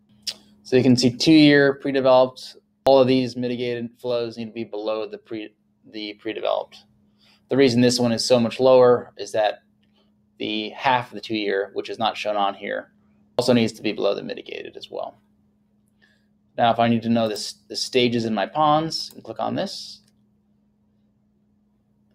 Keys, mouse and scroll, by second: 20.6 click.